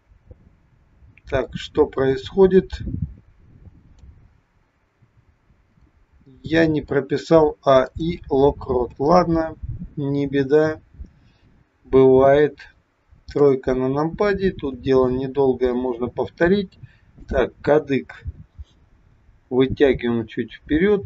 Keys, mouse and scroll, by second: 5.8 click, 6.3 middle click, 7.8 click, 8.9 KP_7, 10.4 r, 13.4 KP_3, 14.7 r, 17.0 click, 19.9 g.